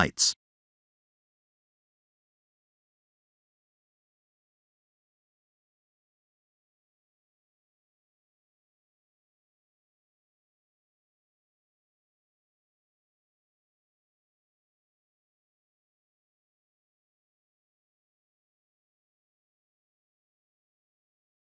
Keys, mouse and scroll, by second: 1.8-2.3 scroll down 4, 2.6 middle click, 4.9-5.4 scroll up 4, 5.9 KP_0, 8.1 shift+z, 9.3 a, 10.8 click, 11.9 click, 12.6-13.1 scroll down 3, 13.2 middle click, 14.6-15.0 scroll down 4, 15.5 shift+middle click, 15.6 shift+middle click, 16.3 middle click, 17.3 click, 17.7 middle click.